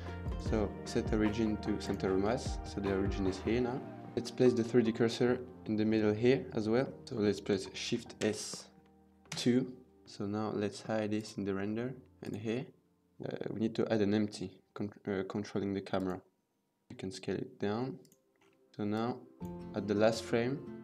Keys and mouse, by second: 2.1-2.5 middle drag, 4.1 shift+a, 7.0 KP_1, 7.9 shift+s, 16.9 s, 18.7 s, 18.8 click.